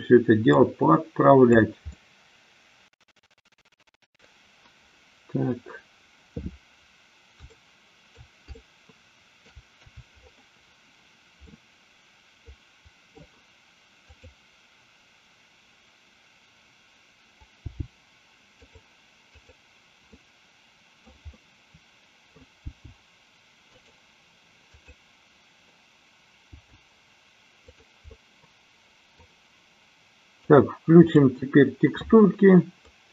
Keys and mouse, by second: 0.6-1.6 drag, 1.9-4.4 middle drag, 7.5-8.3 middle drag, 8.5-9.4 shift+middle drag, 11.5-13.3 middle drag, 14.0 click, 17.6 g, 18.6 click, 19.4-20.8 drag, 20.9 middle click, 21.4-22.5 middle drag, 22.8 g, 23.8 click, 26.5 g, 27.6 click, 28.1-29.1 middle drag, 30.5 click, 31.5-32.3 drag, 32.9-33.1 middle drag.